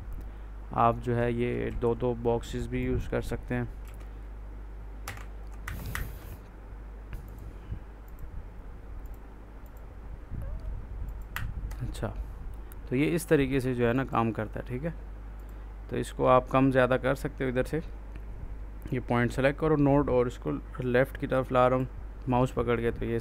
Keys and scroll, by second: 1.5 ctrl+z, 3.7 ctrl+s, 4.9 F1, 5.0 Escape.